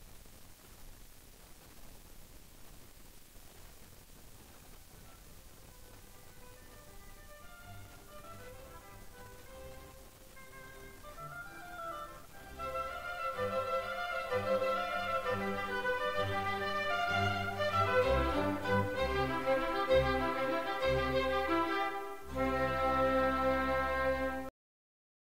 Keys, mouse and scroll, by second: 5.7 scroll down 1, 5.9 middle click, 6.2-10.2 typing, 6.3 middle click, 6.5 scroll down 1, 7.0 alt+s, 7.4 middle click, 7.7 Tab, 7.9 scroll down 1, 8.5 middle click, 8.5 right click, 8.6 middle click, 8.8 middle click, 9.0 middle click, 9.3-9.8 scroll down 2, 9.9 middle click, 10.0 scroll up 1, 10.5 scroll up 1, 11.1 shift+middle click, 11.2 right click, 11.3-23.0 typing, 11.5 shift+middle click, 12.0 shift+middle click, 12.4 scroll up 1, 12.9 right click, 13.2 scroll down 1, 13.6 right click, 14.0 scroll down 1, 14.4 middle click, 14.7 middle click, 14.9 right click, 15.2 middle click, 15.4 scroll down 1, 15.6 middle click, 16.2 middle click, 16.7 middle click, 17.3 middle click, 17.5 scroll down 1, 17.6 middle click, 17.7 scroll up 1, 17.9 right click, 18.0 middle click, 18.3 shift+right click, 18.5 middle click, 18.7-19.4 scroll down 2, 18.7 middle click, 19.4 shift+middle click, 19.6 middle click, 19.7 alt+right click, 20.2 alt+s, 21.0 scroll down 1, 21.1 alt+s, 21.8 alt+right click, 22.2 middle click, 22.5 right click.